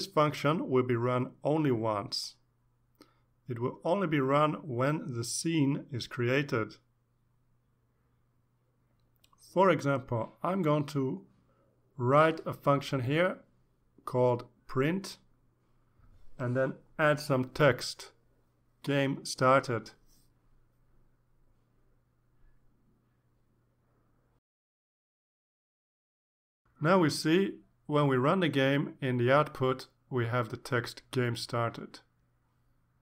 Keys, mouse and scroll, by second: 6.2-8.5 drag, 8.6 click, 10.6 Return, 11.4-12.9 typing, 14.1 shift+9, 14.9 ctrl+Left, 15.2 ctrl+shift+Right, 15.5 shift+p, 15.9 Right, 16.1 Left, 16.3 Left, 17.7-20.4 typing, 21.0 Down, 21.2 Left, 21.3 Left, 21.9 shift+Right, 22.0 shift+Right, 22.9 shift+Up, 22.9 shift+Right, 23.5 Right, 24.0 BackSpace, 25.3 ctrl+s, 29.3 click, 31.0-33.0 drag.